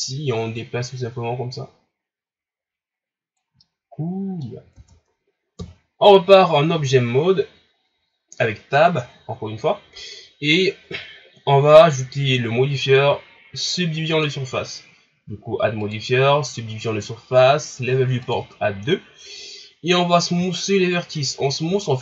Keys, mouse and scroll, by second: 0.0-3.0 drag, 3.6-4.7 middle drag, 4.7 Tab, 5.6 KP_1, 15.9 click, 18.2-20.6 drag, 20.6 shift+scroll down 3, 21.1 scroll up 3, 21.9 shift+scroll up 4.